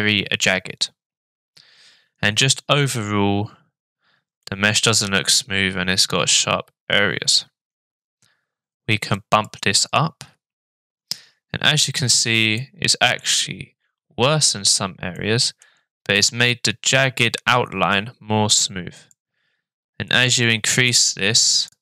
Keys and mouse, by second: 4.4-6.3 shift+middle drag, 9.1 click, 12.6-13.2 middle drag, 15.2-15.6 middle drag, 19.0 click, 20.1 click, 21.5 click.